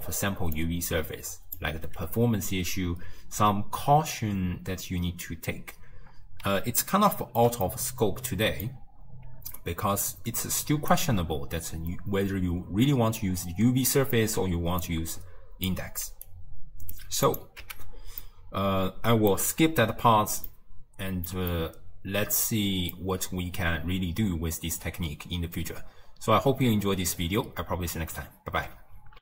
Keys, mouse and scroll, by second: 0.1 d, 0.6-1.6 drag, 1.6 d, 6.9-9.3 ctrl+middle drag, 9.3 d, 9.6-11.0 right drag, 11.0 d, 11.9 d, 14.5 d, 14.9 click, 15.7-16.1 d, 16.3 right click, 17.0 d, 17.1 d, 17.3 click, 17.7 x, 18.3-24.7 middle drag.